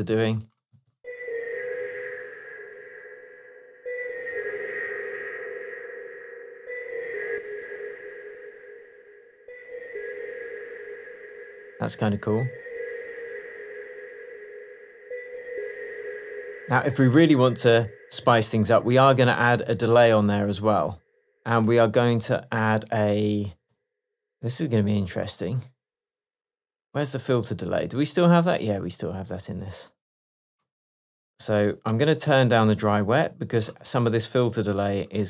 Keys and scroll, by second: 0.8 space.